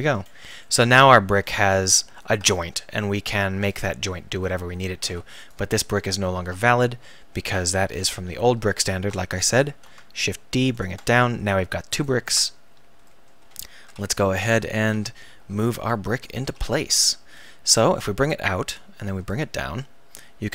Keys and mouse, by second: 0.8 middle click, 4.1 KP_3, 4.5 KP_1, 5.1 Tab, 6.0 Delete, 9.7 shift+d, 10.8-12.0 drag, 12.3 Tab, 13.9-16.4 typing, 17.3 click.